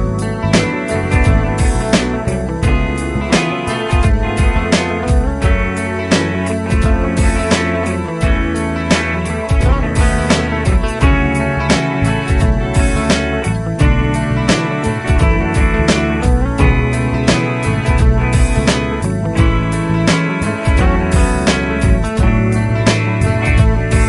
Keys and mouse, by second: 19.7 shift+\.